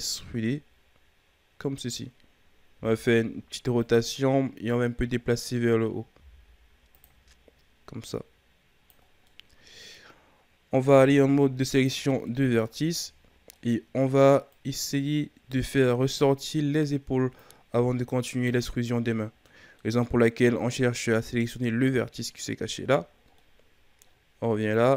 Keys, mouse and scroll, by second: 2.7 r, 4.8-6.1 drag, 6.1 r, 8.0-9.0 drag, 9.0 scroll down 2, 9.2-10.8 middle drag, 10.8 ctrl+Tab, 12.2 middle click, 12.8-13.4 shift+scroll up 2, 13.5-14.5 middle drag, 14.5 right click, 16.0 right click, 16.3-17.3 middle drag, 17.3-19.1 drag, 19.1-20.7 middle drag, 20.7-23.3 scroll up 1, 23.3-24.7 middle drag, 24.7-24.9 drag.